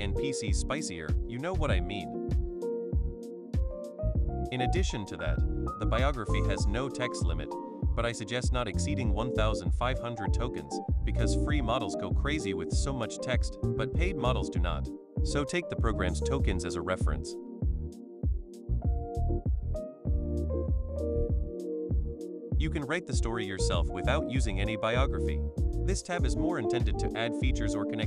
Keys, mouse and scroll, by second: 2.1 click, 8.2-11.1 drag, 11.4 click, 12.3-13.5 drag, 13.9 shift+click, 15.0 BackSpace, 16.4 click, 17.6 BackSpace, 24.8-26.5 scroll down 1, 26.5 click, 27.4 click.